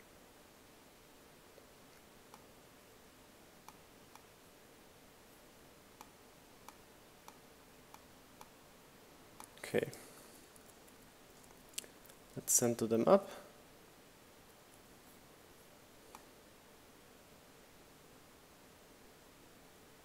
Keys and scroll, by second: 8.0 Up, 11.1 Up, 19.4 shift+Up.